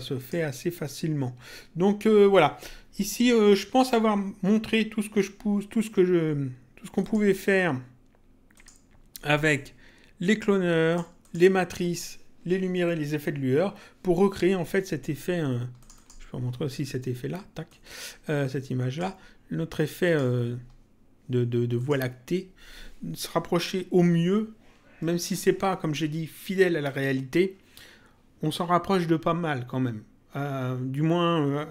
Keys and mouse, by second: 0.1 click, 3.7 click, 7.0 click, 8.5 click, 10.3 click, 15.7 click, 17.6 click, 20.0 click, 21.7 click.